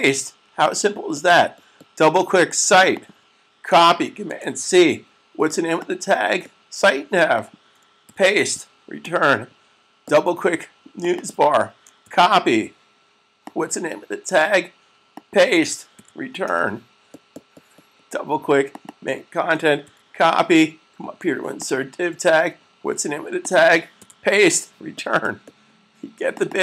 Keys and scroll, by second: 4.2 super+c, 7.9 super+v, 11.6 super+v, 11.9 c, 16.0 super+v, 19.5 super+c, 23.9 super+v.